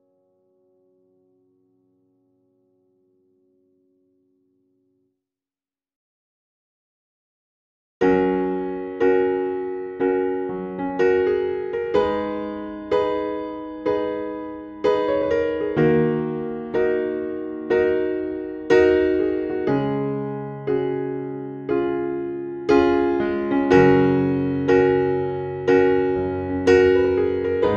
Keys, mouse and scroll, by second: 0.2-4.0 typing, 5.0 scroll down 1, 8.6 click, 9.9 space, 11.5-21.8 drag, 22.1 scroll down 1, 23.1 scroll up 1, 24.2-27.7 drag.